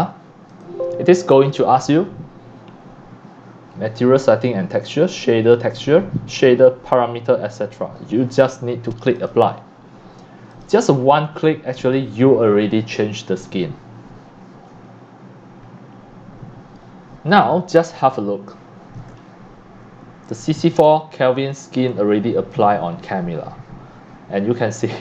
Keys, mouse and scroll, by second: 0.5 click, 5.9-6.8 drag, 9.2 click, 10.5 click, 13.9-16.7 drag, 19.2-19.8 scroll up 2, 20.3 x, 20.7 x, 20.9 x, 20.9 click, 21.8 c, 21.9 click, 23.4-23.9 scroll up 3.